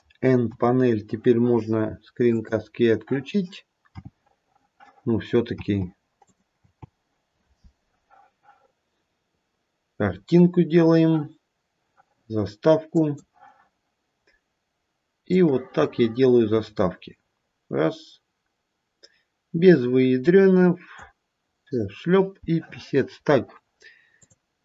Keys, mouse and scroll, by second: 0.5 n.